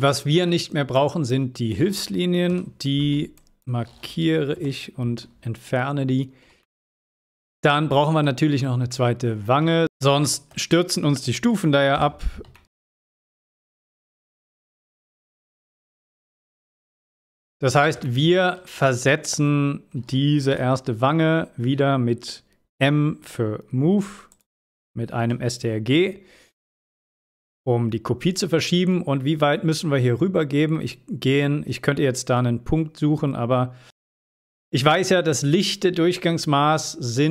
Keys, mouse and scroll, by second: 0.1-0.7 shift+middle click, 0.9-1.5 drag, 6.6-7.5 middle drag, 8.3 scroll up 1, 8.9-9.5 middle click, 9.4 scroll up 1, 10.9 click, 11.9-12.6 typing, 14.1 scroll up 1, 16.2-16.6 scroll down 1, 16.8-17.5 middle click, 17.5 scroll up 1, 18.0-18.6 shift+middle click, 18.7 scroll up 1, 20.5 m, 24.3 click.